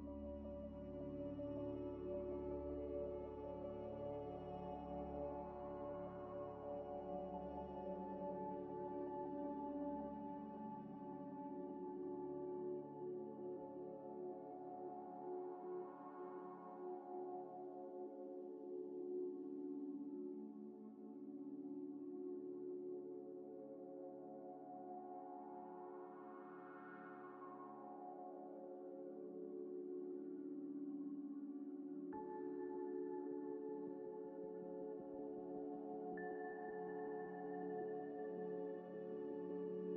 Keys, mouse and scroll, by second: 0.0-0.3 typing, 2.2 middle click, 3.7-5.5 typing, 4.6 Tab, 6.5 ctrl+z, 6.8 g, 8.0 g, 8.0 x, 8.4 ل, 8.5 ctrl+ئ, 8.9 ctrl+ئ, 9.4 ctrl+ق, 10.1 double click, 10.6 scroll up 1, 11.2 ctrl+y, 11.4 scroll down 1, 14.1 2, 14.4 alt+click, 14.9 alt+click, 15.9-16.9 scroll up 2, 17.2 ctrl+z, 17.4 scroll down 1, 17.8 Tab, 18.1 z, 18.5 right click, 19.1 ctrl+z, 20.1 scroll up 1, 22.3 scroll up 1, 22.3 ذ, 23.1 scroll down 1, 23.5 scroll up 1, 23.6 scroll down 1, 24.0 scroll up 1, 24.4-26.3 typing, 24.5 shift+click, 26.5 Return, 30.7 scroll up 1, 31.6 scroll up 1, 32.0 shift+click, 35.4 shift+ي, 36.3 ctrl+ئ, 37.0 shift+click, 37.4-39.9 typing, 37.5 shift+click.